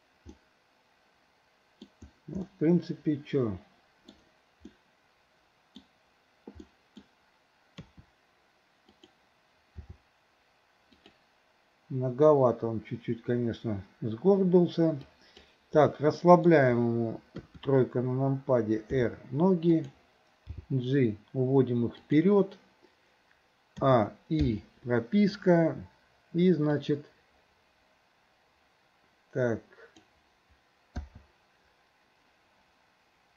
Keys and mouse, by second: 0.4-1.9 middle drag, 2.5-4.2 middle drag, 4.8-5.9 middle drag, 6.7-7.1 middle drag, 7.8 KP_3, 8.9 click, 9.9 r, 15.2 click, 16.2 middle click, 17.4 KP_3, 19.0 r, 20.6 g, 23.8 a, 24.5 i, 26.8-30.2 drag, 31.1 i.